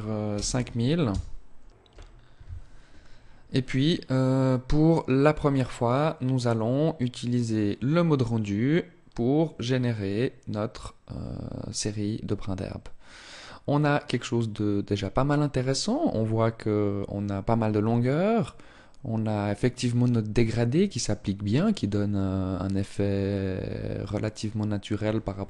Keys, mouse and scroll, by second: 5.9 click, 12.7 scroll up 1, 21.3-22.9 scroll down 1.